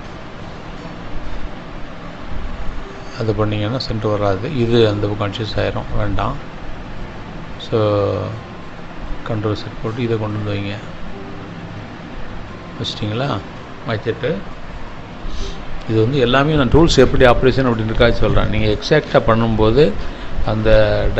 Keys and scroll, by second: 0.7 ctrl+z, 13.0 Delete.